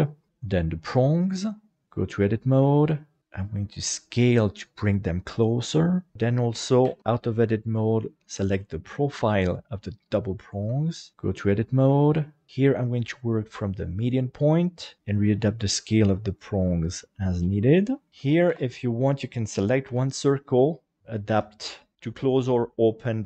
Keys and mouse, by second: 0.3 right click, 1.8 Tab, 2.5 middle click, 3.2 s, 6.9 Tab, 8.1 right click, 9.0 shift+middle click, 9.4 middle click, 10.7 Tab, 11.7 a, 12.9-14.0 drag, 17.7 click, 17.9 middle click, 18.1 shift+KP_7, 18.5 alt+a, 19.9 l, 21.3 alt+a, 22.6 middle click.